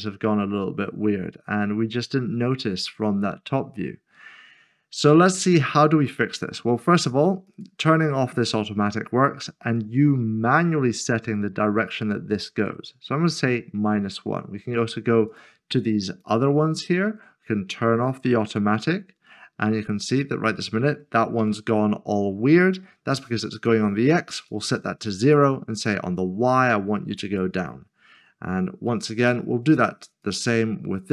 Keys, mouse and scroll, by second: 0.0 middle click, 7.5 click, 12.8 click, 15.3 click, 16.6 scroll down 1, 18.1 click, 19.3 middle click, 22.7-23.6 typing, 24.7 d, 25.3 click, 29.2 click.